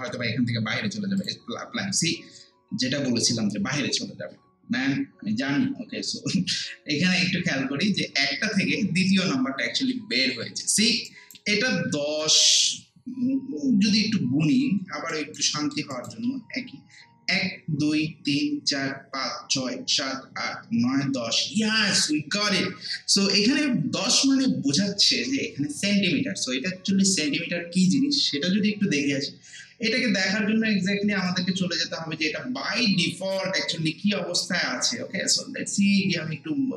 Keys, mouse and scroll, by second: 1.2 click, 9.9 scroll down 1, 10.6 alt+middle click, 11.1 alt+right click, 13.9 scroll up 1, 15.1 alt+right click, 15.6 alt+middle click, 15.9 alt+right click, 31.2 click.